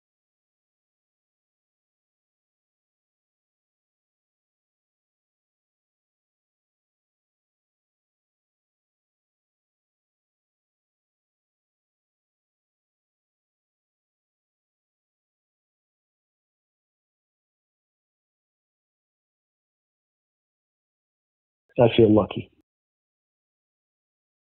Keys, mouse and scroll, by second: 0.8 click, 2.3 click, 3.7 scroll down 2, 4.3-5.0 scroll down 4, 5.4 scroll down 2, 6.3 click, 6.4 click, 7.7 click, 8.3-9.6 drag, 10.5-13.2 typing, 15.0 click, 16.2 click, 20.4 ctrl+shift+Delete, 21.5 click, 21.6 space, 22.8 space, 23.5 click.